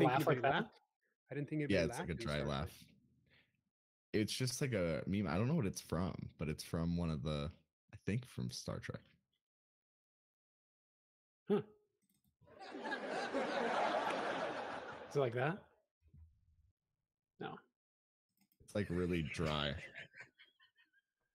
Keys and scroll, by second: 0.0-0.7 typing, 7.2 space, 15.8 m, 17.8 space, 19.3 typing.